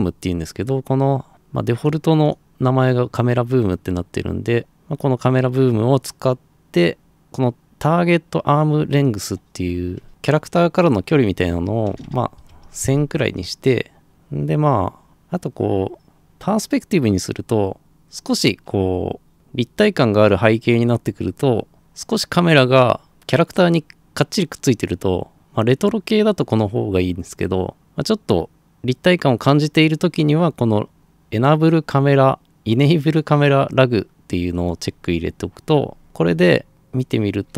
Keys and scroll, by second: 11.2-13.0 typing.